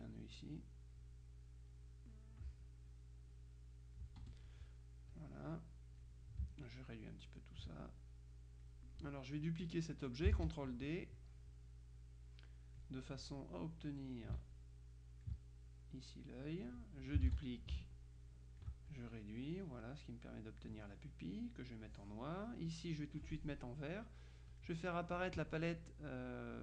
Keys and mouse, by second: 1.8-3.0 drag, 3.6-4.6 drag, 4.3 F1, 5.2-6.6 drag, 6.8-8.2 ctrl+drag, 10.4 ctrl+d, 11.3-13.4 drag, 14.6-15.8 ctrl+drag, 17.4 ctrl+d, 17.9-22.4 ctrl+drag, 22.8 click, 24.6 click.